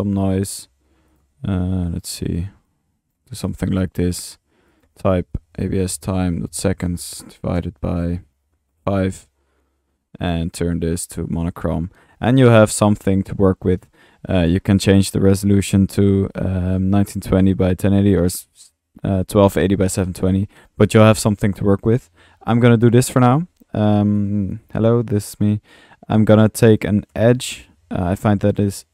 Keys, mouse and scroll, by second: 0.6 click, 1.1 drag, 1.6-2.1 drag, 2.6-3.2 drag, 3.4 click, 4.0-4.3 drag, 4.7-5.0 drag, 5.2 click, 10.4 drag, 11.2 click, 11.7 middle click, 14.4 click, 15.0 click, 16.3-16.7 drag, 17.0 drag, 17.3-18.8 drag, 19.0 middle click, 19.5 drag, 19.9 click, 20.6 click, 21.5 right click, 22.8 Delete, 23.0-23.4 drag, 23.9 click, 25.1 click, 26.6-27.4 drag, 27.3-28.1 typing, 28.3 click.